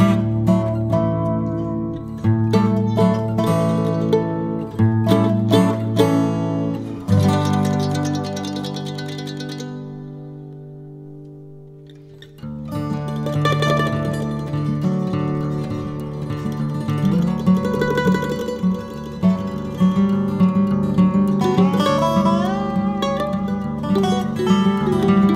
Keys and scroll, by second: 6.9 KP_1, 8.2 ctrl+b, 10.9 ctrl+z, 11.6 ctrl+z, 13.4 ctrl+b, 19.4 KP_1, 22.2 shift+d, 22.8 g, 24.0 Tab, 24.9 z.